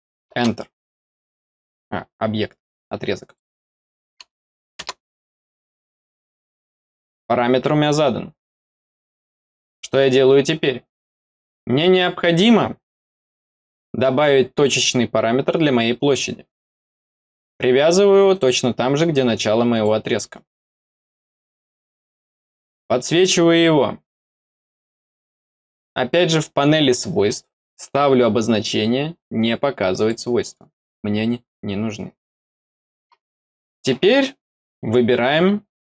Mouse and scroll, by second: 3.2 click, 5.5 scroll down 1, 5.9 middle click, 7.4 scroll up 1, 9.4 scroll down 1, 11.3 middle click, 11.8 scroll down 1, 13.5 click, 15.9 click, 18.2 click, 19.6 click, 22.5 click, 24.9 click, 25.3 click, 29.9 click, 33.4 middle click, 35.7 scroll up 2.